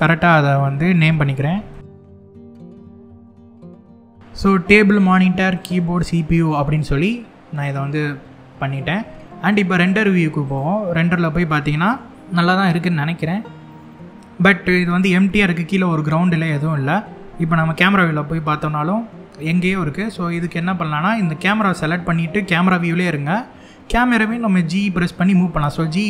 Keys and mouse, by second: 2.2 F2, 3.4 F2, 4.7 click, 5.2 click, 5.6 click, 6.2-7.2 middle drag, 10.1 click, 10.8-11.6 middle drag, 12.1-13.5 middle drag, 17.2 KP_0, 21.1 click, 25.0 g, 25.7 z.